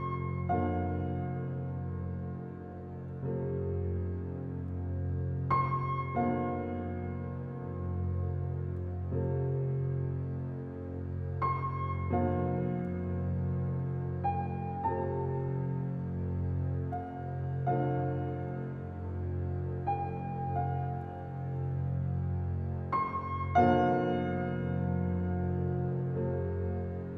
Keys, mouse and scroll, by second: 1.1 click, 1.8 scroll down 1, 1.9-2.5 middle drag, 2.5 click, 3.0 shift+click, 3.3 shift+click, 4.0 shift+click, 4.4 shift+click, 4.9 shift+click, 5.2 shift+click, 5.9 g, 10.3-10.8 scroll up 5, 10.8-11.6 shift+middle drag, 11.6 shift+click, 12.4-13.0 scroll down 3, 13.0 g, 15.9-16.5 middle drag, 16.5-17.0 scroll up 1, 17.2 click, 17.7 g, 19.7 scroll down 2, 20.0-20.3 middle drag, 20.3 click, 20.5 scroll down 2, 20.9 middle drag, 21.2 click, 21.4 scroll down 1, 21.6-22.3 middle drag, 22.3 scroll up 1, 22.5 click, 24.7 click, 26.0 Tab, 26.6 a.